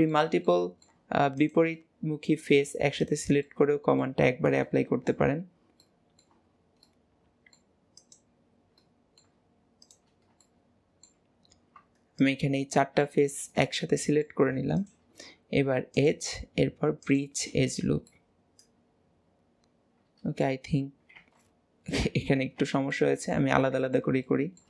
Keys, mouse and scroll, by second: 0.1-1.4 shift+middle drag, 1.4 shift+click, 1.8-3.0 middle drag, 3.0 shift+click, 3.5 middle click, 4.4 scroll down 4, 4.7 shift+middle click, 5.4 scroll up 2, 5.9-8.0 middle drag, 8.0 shift+click, 8.8-9.9 middle drag, 9.9 shift+click, 10.2 scroll down 1, 10.5 shift+middle click, 11.3 scroll down 2, 12.3 shift+click, 12.6-14.8 middle drag, 14.8 shift+click, 16.0-17.5 drag, 17.5-18.2 scroll down 4, 18.2-21.2 middle drag, 21.2 ctrl+z, 22.1 ctrl+z, 22.9-24.6 middle drag.